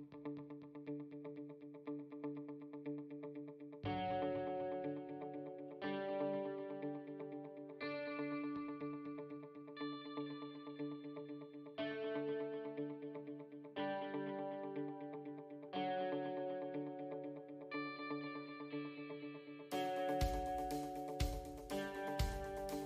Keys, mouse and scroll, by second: 1.4-2.8 scroll down 9, 3.0 scroll down 1, 3.0 i, 6.3 middle click, 7.2 click, 12.0-13.5 scroll up 5, 13.5-14.0 scroll up 2, 14.0 e, 16.0 s, 17.7-18.1 scroll down 3, 19.0 alt+click, 19.8 alt+click, 20.9 e.